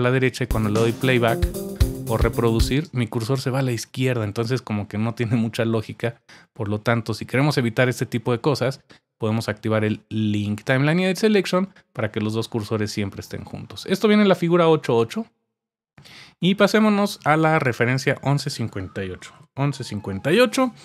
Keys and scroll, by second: 18.9-20.2 typing.